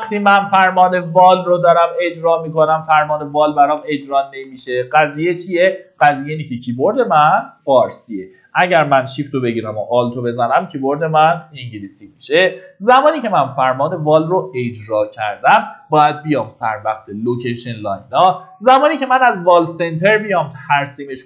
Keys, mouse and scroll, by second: 0.2-2.5 typing, 3.7 middle click, 4.0-5.2 typing, 7.3-8.1 typing, 8.3 middle click, 10.9 middle click, 11.5 typing, 17.5 click, 20.2-21.1 scroll up 1, 21.1 click.